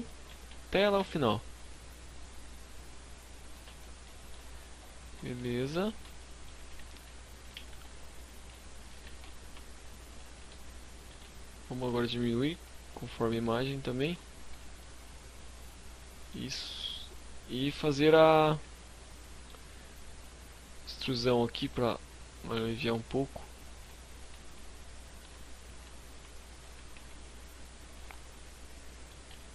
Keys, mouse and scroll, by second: 0.0 e, 0.2 right click, 0.7 click, 3.0-5.1 shift+scroll up 11, 3.1 shift+middle click, 4.1 shift+middle click, 5.1 shift+middle click, 5.7 g, 6.5 shift+click, 6.7 s, 7.9 shift+click, 8.0 g, 9.2 shift+click, 9.4 s, 10.9 shift+click, 11.1 g, 11.9 shift+click, 12.3 scroll down 2, 12.8 shift+middle click, 13.1-14.2 scroll down 4, 13.7 shift+middle click, 15.6 shift+middle click, 16.0-17.0 scroll up 2, 17.0 KP_Decimal, 17.2 KP_5, 17.5 z, 17.6 scroll up 1, 17.7 scroll down 3, 18.0 middle click, 20.2 e, 20.4 right click, 20.7 s, 21.4 click, 21.9 shift+click, 23.1 click, 24.6 s, 25.5 shift+click, 25.8 s, 27.0 shift+click, 27.1 scroll up 1, 27.2 middle click, 28.2 s, 29.4 shift+click.